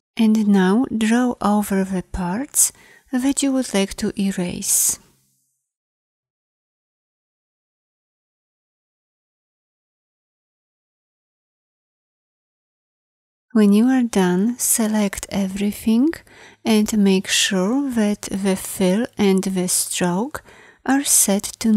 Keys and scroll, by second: 6.3 [.